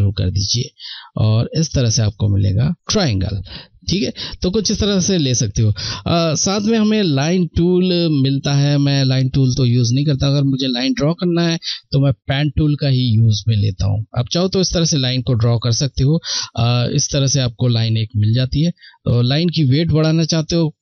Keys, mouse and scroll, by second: 2.7 ctrl+z, 4.7 click, 12.7 shift+Num_Lock, 12.7 click, 12.8 click, 17.2 ctrl+Num_Lock, 17.2 shift+click, 17.9 z.